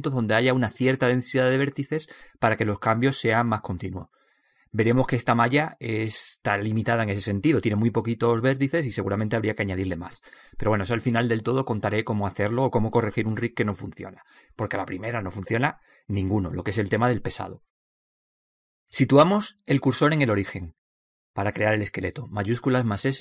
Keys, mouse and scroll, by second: 10.9-12.8 drag, 14.0 a, 14.4 a, 16.7 click, 20.1 shift+s.